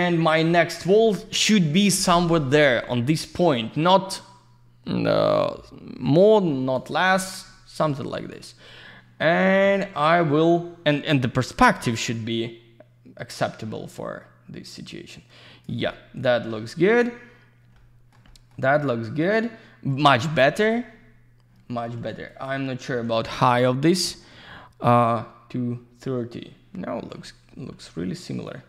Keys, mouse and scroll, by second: 5.3 click, 7.7 q, 8.1 click, 12.1 w, 12.1 click, 17.7 alt+middle click, 18.2 middle click, 18.7 alt+middle click, 22.2 q, 22.3 click, 23.8 click, 26.9 middle click, 27.5 alt+z, 28.4 click.